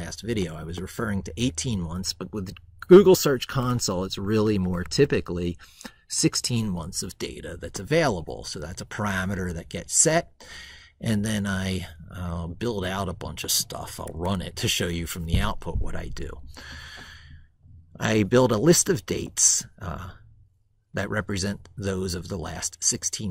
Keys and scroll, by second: 3.7 ctrl+shift+Right.